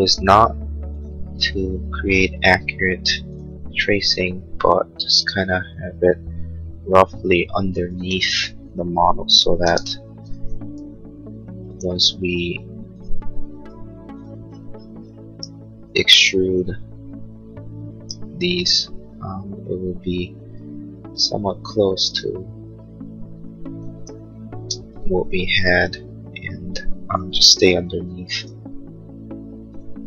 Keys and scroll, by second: 1.4 a, 10.9 l, 13.5 a, 24.6 space, 25.9 h, 27.6 a.